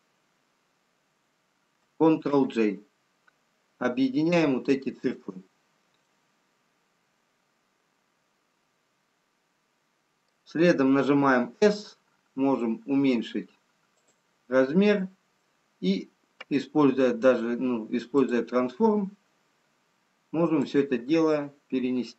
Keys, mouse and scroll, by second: 5.6-6.2 scroll down 1, 6.8 middle click, 6.8-8.2 scroll down 1, 12.0 s, 14.5-15.5 scroll up 3, 16.9-17.4 scroll up 1, 18.1 click, 19.7-20.9 scroll down 2, 20.9 click.